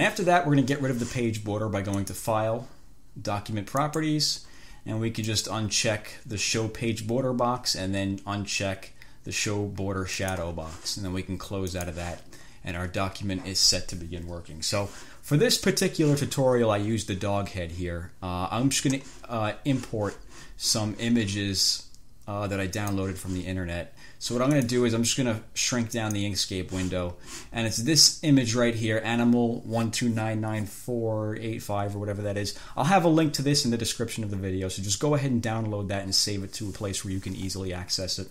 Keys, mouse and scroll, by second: 2.3 click, 4.1 click, 5.6 click, 10.4 click, 11.9 click, 15.9 click, 23.0 click, 24.9 click, 26.2 click.